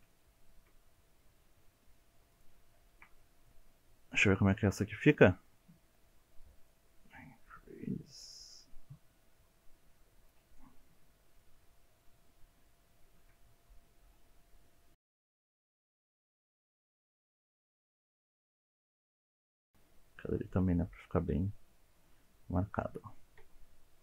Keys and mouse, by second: 0.2 shift+middle click, 1.1 shift+middle click, 1.5 alt+z, 1.7 shift+middle click, 2.3 alt+z, 2.6 middle click, 2.9 shift+middle click, 3.4 shift+middle click, 6.3-8.7 drag, 8.9 middle click, 9.6-10.6 shift+middle drag, 11.9 click, 12.7-15.0 drag, 15.2 middle click, 16.6 ctrl+z, 18.6 click, 19.4 middle click, 22.3 middle click, 23.4 Tab.